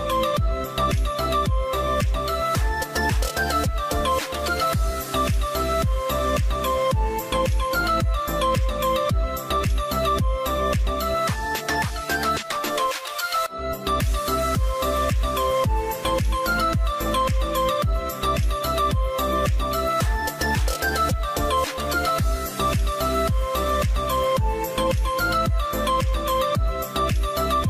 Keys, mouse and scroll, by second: 5.6 0, 5.8 Return, 5.9 8, 20.5-21.3 scroll down 2, 21.3-22.6 scroll down 1, 23.8 scroll down 1, 23.9 double click.